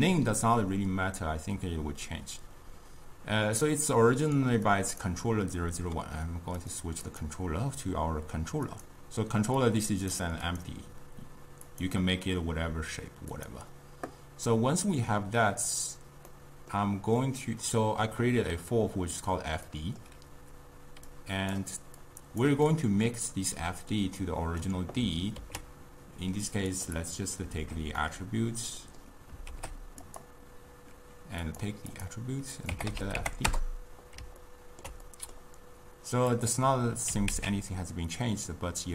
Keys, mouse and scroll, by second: 3.7-6.8 drag, 7.1 click, 9.7-10.6 drag, 11.7 click, 13.4 click, 16.4-19.4 middle drag, 19.8-21.1 middle drag, 21.1-22.1 drag, 22.7-25.4 middle drag, 25.4 ctrl+a, 27.0 click, 28.1-29.5 middle drag, 29.5 shift+d, 31.5-34.5 drag, 34.5-36.4 ctrl+middle drag, 36.4 click, 37.2 g.